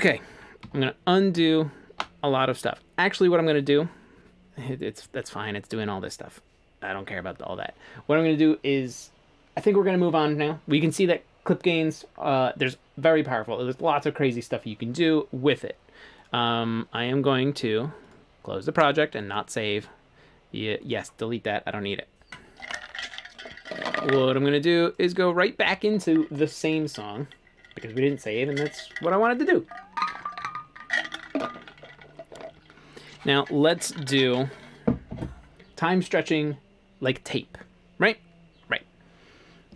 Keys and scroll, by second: 0.3 super+z, 0.7 super+z.